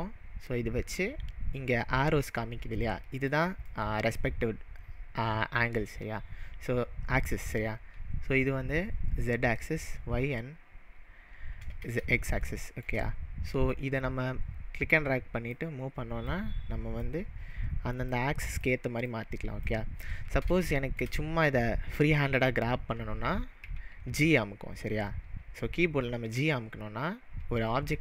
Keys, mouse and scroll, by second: 2.9-10.0 middle drag, 12.0 middle click, 12.5-13.7 shift+middle drag, 13.7 click, 15.6 click, 16.3 click, 16.6-18.1 drag, 18.4 click, 19.4-20.5 drag, 20.7-26.0 shift+middle drag, 26.4 g.